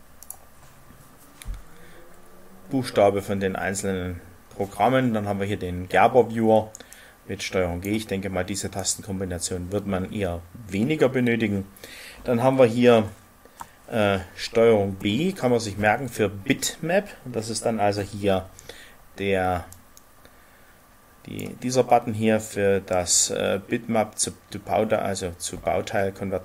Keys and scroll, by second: 14.9 ctrl+b.